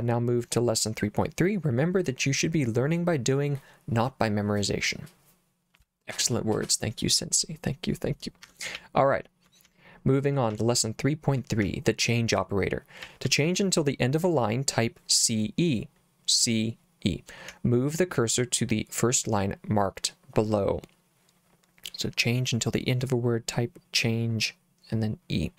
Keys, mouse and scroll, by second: 8.4 Escape, 8.8 j, 9.7 j, 10.5 j, 11.6 j, 13.0 k, 13.3 k, 13.5 k, 17.5 k.